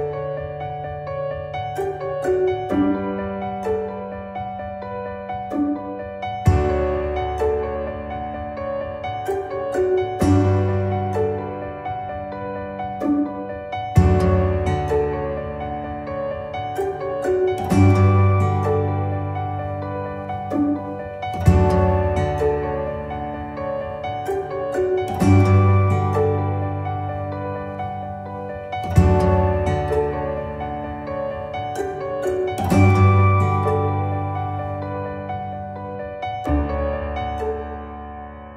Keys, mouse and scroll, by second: 0.7-2.7 shift+middle drag, 2.7 click, 3.0 middle click, 3.6 KP_3, 4.9 click, 5.9 click, 7.1 g, 10.8 click, 11.8 g, 17.4-17.8 scroll down 1, 17.8 scroll up 1, 18.0-19.2 middle drag, 19.2 click, 19.5 scroll down 2, 19.7-20.7 middle drag, 20.7 click, 21.0-21.5 scroll up 4, 21.5 click, 21.9-22.7 middle drag, 22.7 r, 26.4 r, 28.5 ctrl+z, 28.7 ctrl+z, 28.9 ctrl+z, 29.2 ctrl+z, 30.1-30.5 scroll down 1, 30.5-31.3 shift+middle drag, 31.3 scroll up 1, 31.6-32.5 shift+middle drag, 32.5 ctrl+z, 32.9 ctrl+z, 33.5 ctrl+z, 33.8 ctrl+z, 34.2 click, 35.4 click, 36.2-37.3 shift+middle drag, 37.3 g.